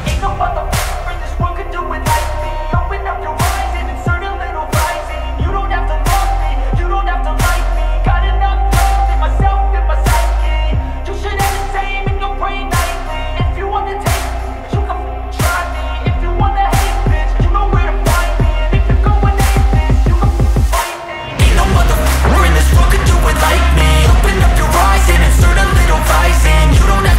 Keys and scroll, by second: 0.4 ctrl+shift+space, 4.9 ctrl+shift+space, 9.3 ctrl+alt+shift+space, 10.6 ctrl+space, 14.9 ctrl+space, 15.8 ctrl+space, 21.3 ctrl+space, 21.9 ctrl+space, 26.2 ctrl+z, 26.6 [.